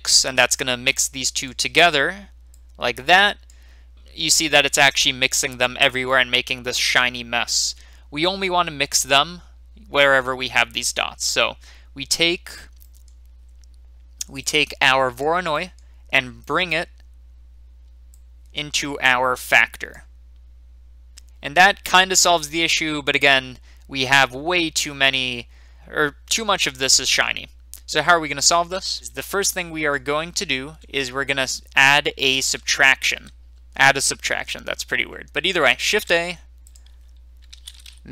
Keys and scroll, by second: 35.8 a, 37.4-38.1 typing.